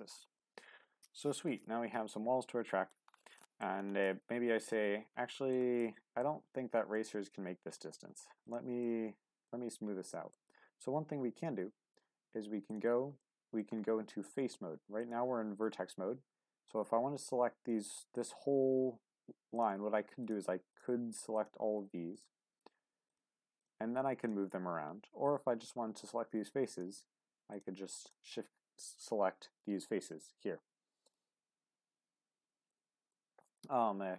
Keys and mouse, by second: 0.4-2.9 middle drag, 3.4 shift+middle click, 4.0 middle click, 5.3 shift+middle click, 5.8 middle click, 7.0 middle click, 8.4 click, 8.8 middle click, 10.1 shift+middle click, 12.7 click, 13.2 middle click, 15.0-19.7 drag, 20.2 shift+click, 20.7-23.2 shift+drag, 23.6 shift+click, 26.0 click, 27.5 shift+click, 31.0 click, 32.7 middle click.